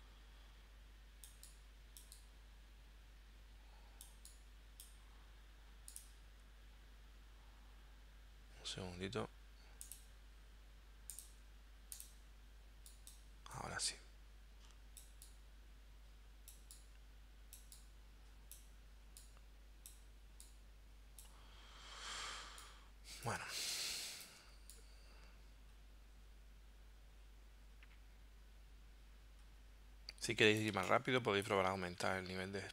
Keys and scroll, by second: 23.6 space, 30.7 space.